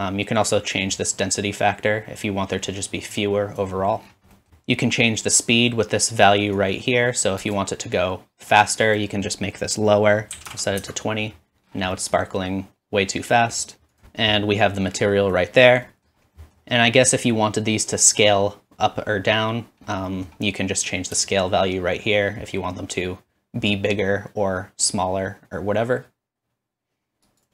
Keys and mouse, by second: 2.2-5.2 drag, 5.2-7.6 middle drag, 8.0 middle click, 8.8-21.1 drag, 25.3 shift+click.